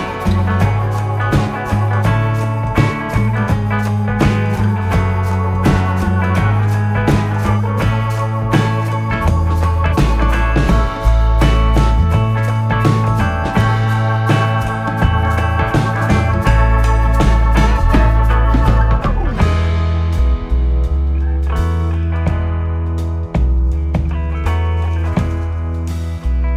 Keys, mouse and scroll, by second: 0.8 KP_7, 2.0-3.6 scroll down 5, 3.6-4.4 scroll down 1, 4.4 s, 7.5 e, 9.8 s, 12.8 e, 14.9 s, 16.9 scroll down 4, 17.1-20.1 middle drag, 20.2-20.5 scroll down 1, 20.5-22.8 middle drag, 22.8 KP_7, 24.5 KP_1, 26.0 scroll up 3.